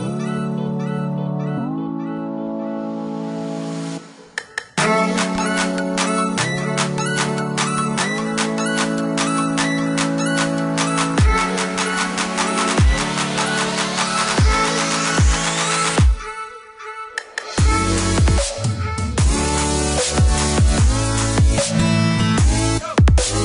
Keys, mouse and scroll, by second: 0.2 click, 3.3 click, 3.8 click, 4.6 KP_1, 4.8 KP_5, 5.1 KP_Enter, 5.7 Escape, 8.3 ctrl+click, 9.8 ctrl+click, 13.3 click, 14.7 click, 17.0 click, 17.6 click, 17.9 space, 18.5 click, 19.2 click, 22.9 click.